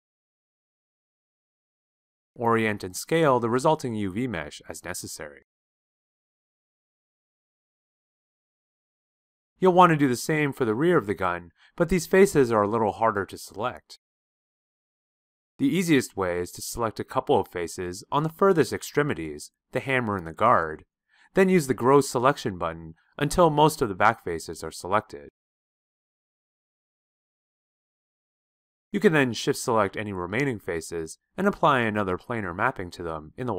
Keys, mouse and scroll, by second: 0.3-0.7 shift+right drag, 0.7 shift+click, 32.4-33.5 shift+drag.